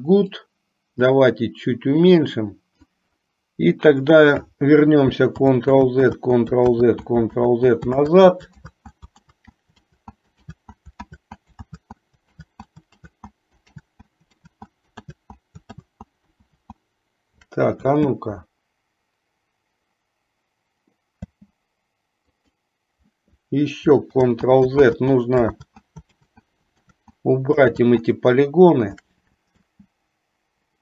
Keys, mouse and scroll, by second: 0.4-3.3 drag, 5.5 ctrl+z, 6.4 ctrl+z, 7.0 ctrl+z, 7.7 ctrl+z, 8.3 ctrl+z, 9.4 ctrl+z, 10.2 ctrl+z, 10.8 ctrl+z, 11.4 ctrl+z, 12.0 ctrl+z, 12.8 ctrl+z, 13.4 ctrl+z, 14.8 ctrl+z, 16.2 ctrl+z, 16.8 ctrl+z, 17.9 space, 21.5 space, 22.8 click, 24.4 ctrl+z, 25.2 ctrl+z, 25.9 ctrl+z, 26.5 ctrl+z, 27.2 ctrl+z, 28.0 ctrl+z, 29.7 space.